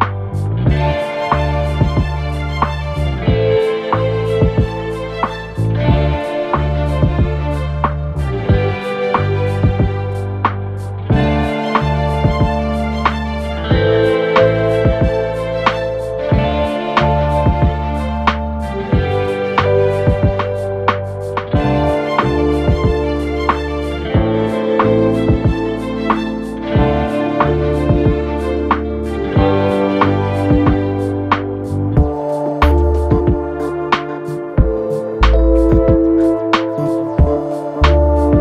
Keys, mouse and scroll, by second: 32.9 typing, 36.9 typing.